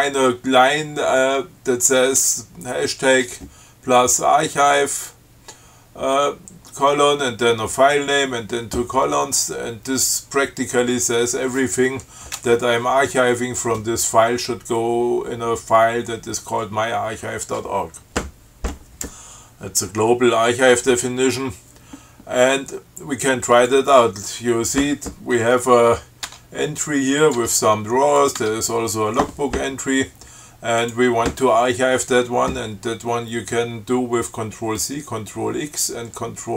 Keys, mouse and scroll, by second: 23.7 click, 26.5 Tab, 27.4 click, 27.6 Tab, 28.4 click, 28.6 Tab, 31.1 click.